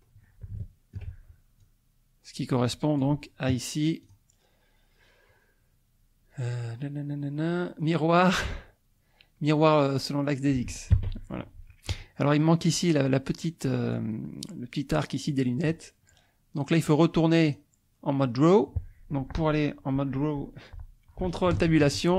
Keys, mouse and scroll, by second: 0.6 shift+middle click, 1.6-3.2 drag, 4.0 click, 10.9 Escape, 17.4 click, 21.6 ctrl+Tab.